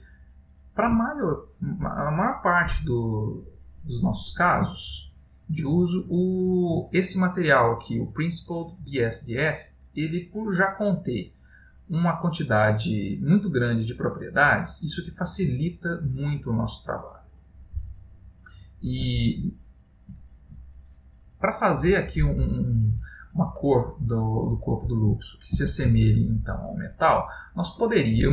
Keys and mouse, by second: 5.0 ctrl+middle click, 7.0 click, 8.2 click, 9.0 click, 10.6 middle click, 12.9 middle click, 16.2 middle click, 18.1 middle click, 19.3 ctrl+middle click, 22.8 middle click, 26.1 shift+middle click.